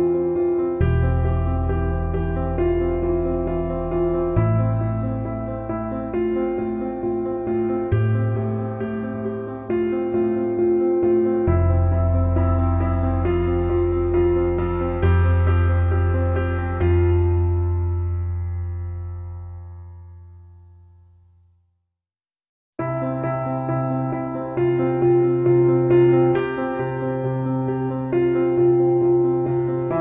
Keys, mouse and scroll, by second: 1.7 middle click, 2.1 middle click, 2.3 middle click, 2.4 middle click, 2.7 middle click, 3.2 middle click, 3.9 middle click, 4.1 middle click, 4.4 middle click, 5.0 middle click, 5.2 middle click, 5.5 middle click, 5.8 middle click, 7.7 middle click, 10.5 middle click, 11.6 middle click, 13.7 middle click, 16.1 middle click, 16.5 middle click, 16.7 middle click, 17.0 middle click, 17.2 middle click, 17.8 middle click, 18.3 middle click, 18.5 middle click, 18.9 middle click, 19.3 middle click, 20.9 middle click, 21.2 middle click, 22.6 middle click, 23.6 middle click, 23.7 middle click, 24.2 middle click, 24.8 middle click, 25.3 middle click, 25.5 middle click, 25.7 middle click, 25.8 middle click, 26.4 middle click, 26.7 middle click, 26.9 middle click.